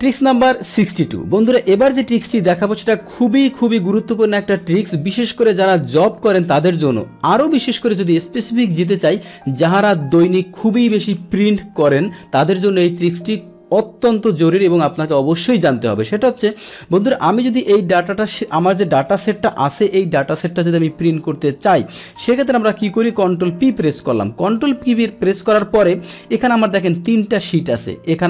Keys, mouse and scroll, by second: 17.2 click, 18.2 click, 19.3 ctrl+shift+Down, 19.6 ctrl+shift+Right, 23.5 ctrl+p.